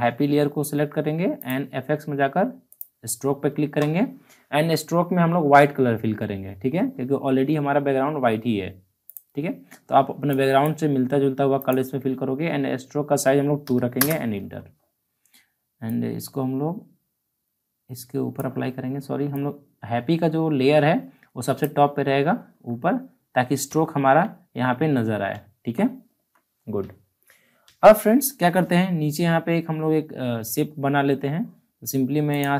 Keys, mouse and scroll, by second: 1.4 click, 9.0 click, 9.0 click, 13.9 Return, 15.8-23.7 drag, 23.7 alt+scroll up 1, 25.4 alt+scroll down 2, 26.6-27.4 scroll down 2, 27.7 alt+scroll down 1, 28.4-30.2 scroll down 1, 30.7-31.0 alt+scroll up 1.